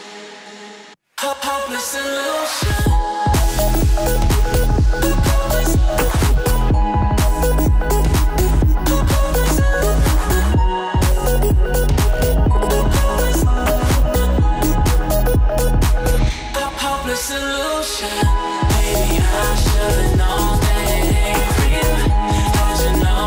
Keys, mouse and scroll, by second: 0.1 alt+scroll up 1, 0.7 click, 0.9 Delete, 1.2-1.6 click, 1.7 alt+scroll up 1, 2.2 right click, 2.9 click, 3.3 alt+scroll up 1, 3.4 click, 4.4-6.5 typing, 7.6 click, 9.6 click, 11.9-12.7 click, 14.0 alt+scroll down 1, 14.5 click, 15.0 alt+scroll up 1, 15.7 click, 16.3 alt+scroll down 1, 16.7 click, 17.0 alt+scroll up 1, 17.2 alt+scroll down 1, 17.4 alt+scroll up 1, 17.7-18.6 click, 18.7 alt+scroll down 1, 18.9 alt+scroll up 1, 19.1 alt+scroll down 1, 19.3 click, 19.6 alt+scroll up 1, 19.9-20.3 click, 20.5-20.8 shift+drag, 21.6-22.1 alt+scroll down 2, 21.7 click, 22.1 alt+scroll up 1, 22.2 click, 22.6 F7, 23.0-23.2 drag.